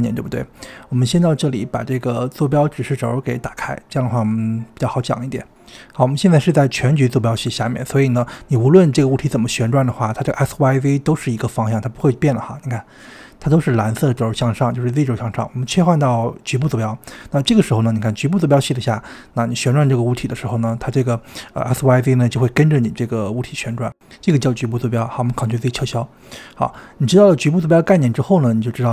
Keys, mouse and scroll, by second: 0.2 click, 2.5-5.4 drag, 5.7 click, 7.5 r, 9.7 ctrl+z, 10.7 click, 11.6 r, 13.4 ctrl+z, 15.3-17.7 drag, 17.7 r, 25.7 ctrl+z, 26.0 drag, 26.6 click, 27.5 click, 28.6 click.